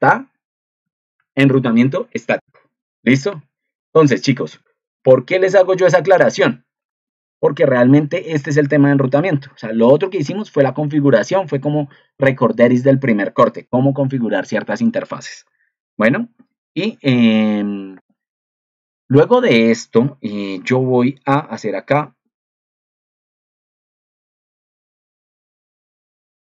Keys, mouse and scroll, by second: 5.5 ctrl+2, 24.7 ctrl+3.